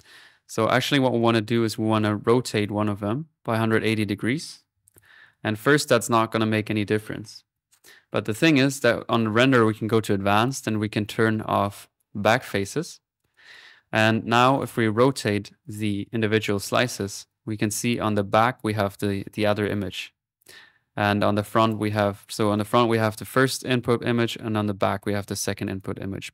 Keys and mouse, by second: 0.2 click, 1.2 click, 1.5 click, 2.5 click, 3.6-5.4 drag, 5.7 click, 6.0-6.8 typing, 6.1 middle click, 8.6-11.1 drag, 11.5 click, 12.2 click, 13.0 middle click, 13.3 click, 14.5 click, 15.6-21.9 drag, 22.1 middle click, 22.4 click, 23.1 middle click, 23.5 click, 25.0 click, 25.6 click, 25.9 click, 26.2 middle click.